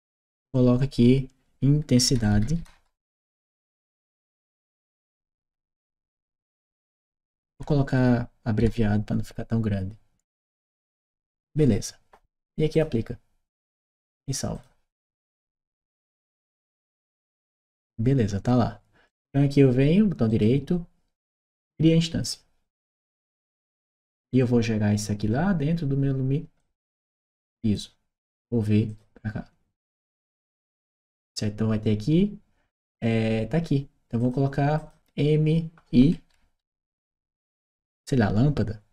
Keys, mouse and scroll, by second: 1.7-3.1 typing, 4.9-7.0 typing, 8.4 l, 11.3 click, 12.5 click, 14.3 click, 18.8 click, 20.1 right click, 22.0 click, 22.9 click, 26.4-27.5 drag, 28.7 click, 29.8 click, 34.0 click, 34.6 click, 36.4 shift+m, 36.7 shift+i.